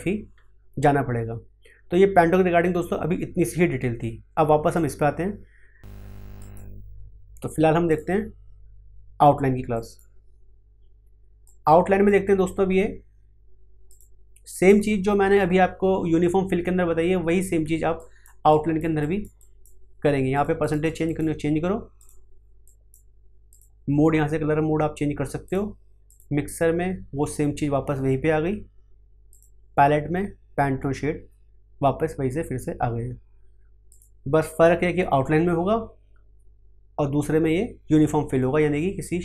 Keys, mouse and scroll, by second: 8.0-13.9 drag, 17.9 click, 31.0 click, 33.9 click.